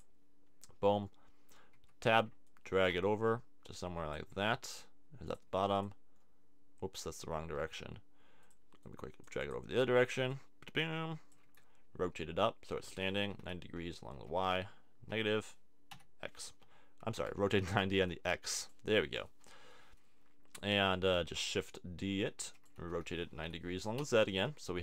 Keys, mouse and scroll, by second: 1.0 middle click, 1.9 Tab, 2.4-3.8 drag, 4.3 Tab, 5.3-7.1 drag, 7.1 Tab, 10.3 click, 11.4 Tab, 12.2 r, 17.1 r, 18.7 click, 21.4 Tab, 22.4 shift+d, 22.9 r, 24.6 Tab.